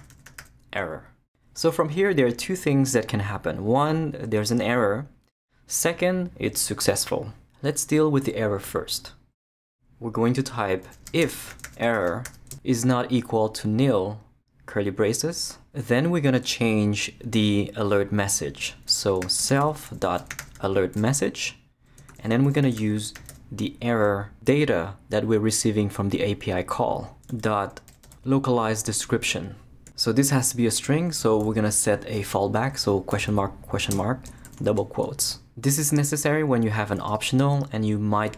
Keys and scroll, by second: 0.0-0.9 typing, 9.0 BackSpace, 10.7-14.7 typing, 15.1 shift+Return, 18.8-23.8 typing, 27.3-28.7 typing, 28.9 Return, 31.1 space, 33.1 shift+/, 33.9 shift+space, 34.5 shift+'.